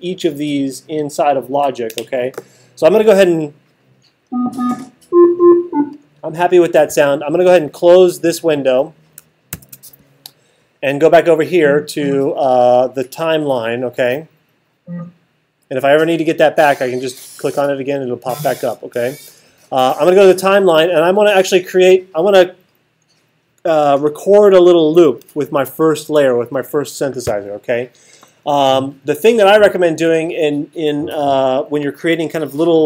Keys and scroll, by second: 9.5 alt+super+8.